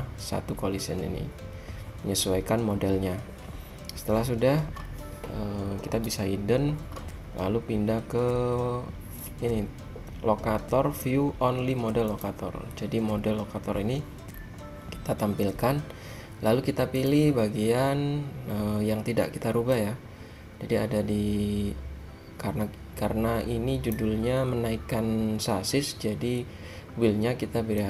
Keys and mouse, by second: 6.0 h, 12.2-14.1 drag, 14.1-15.7 middle drag, 16.4-17.1 middle drag, 17.1-18.9 drag, 20.0-21.7 drag.